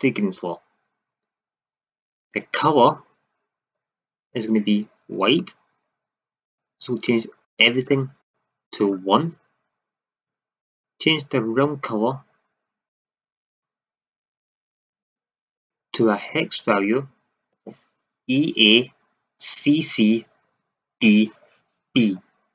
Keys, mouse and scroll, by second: 2.7-12.5 drag.